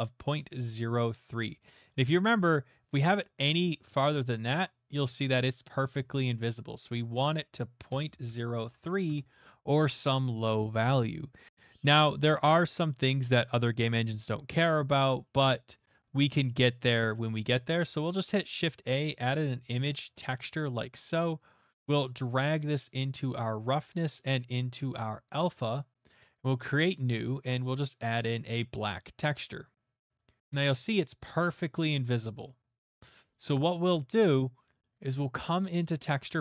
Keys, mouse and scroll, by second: 0.6 middle click, 0.6 middle click, 0.7 middle click, 1.4 middle click, 4.0 click, 4.2 middle click, 4.2 middle click, 5.1 middle click, 5.3-5.7 shift+middle click, 5.9 middle click, 6.1 shift+middle click, 7.0 click, 8.2-8.7 typing, 9.1 Return, 15.2 middle click, 16.8 middle click, 17.7 click, 17.7 shift+a, 18.3 click, 19.1-19.8 typing, 19.8 Return, 20.8 click, 22.3 click, 23.6 click, 23.6 typing, 25.3 click, 26.4 click, 27.7 click, 29.4 click, 32.1-35.8 middle drag.